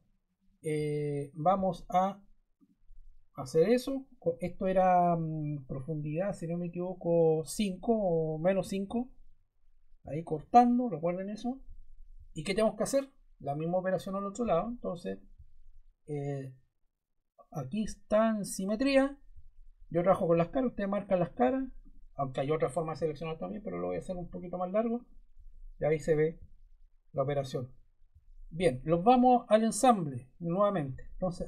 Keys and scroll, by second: 8.8 5.